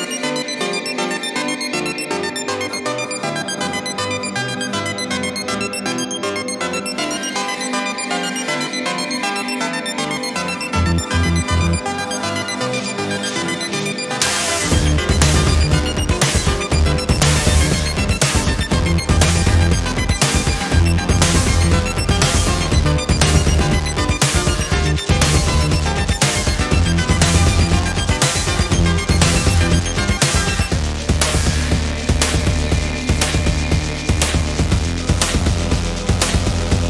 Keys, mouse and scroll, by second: 2.6 ctrl+shift+click, 3.7 ctrl+shift+KP_Multiply, 6.2-8.6 ctrl+drag, 9.1-9.7 ctrl+scroll up 4, 10.6 ctrl+d, 11.6 ctrl+d, 12.2-15.0 ctrl+drag, 15.4 shift+click, 18.0 ctrl+KP_Subtract, 20.6 click, 21.5 click, 23.5 click, 25.2 click, 26.3 click, 28.1 click, 28.8-29.6 ctrl+scroll down 6, 30.3 ctrl+KP_5, 31.9-32.8 ctrl+scroll up 2, 33.8 click, 34.5 shift+click, 35.7 ctrl+g.